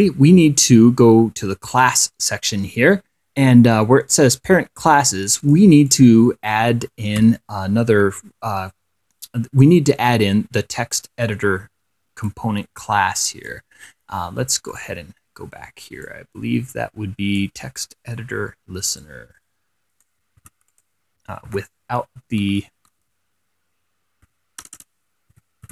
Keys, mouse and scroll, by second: 2.0 click, 5.7 click, 6.2 click, 12.6 click, 13.2 click, 13.7 click, 15.0 click, 16.8-18.2 drag, 19.3-20.5 drag, 20.7 ctrl+c, 21.0 ctrl+click, 21.8 ctrl+v, 22.2 ctrl+7, 22.9 ctrl+6, 24.5 6, 24.9 BackSpace, 25.6 ctrl+a.